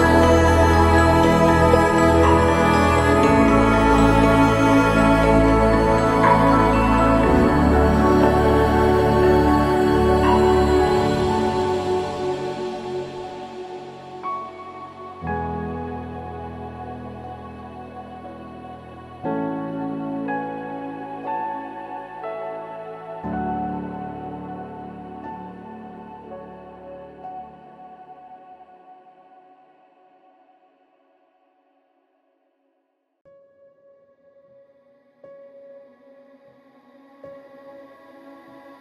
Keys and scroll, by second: 0.3 ctrl+0, 22.1 ctrl+0, 27.7 ctrl+s.